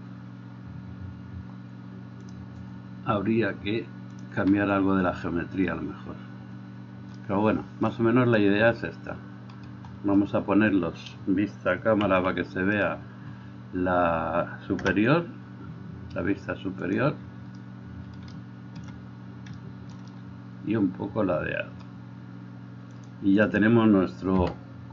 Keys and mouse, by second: 0.0-2.5 middle drag, 2.5-17.2 drag, 12.3 n, 15.1 KP_0, 17.2-23.2 middle drag, 23.2-24.8 drag, 24.8 middle click.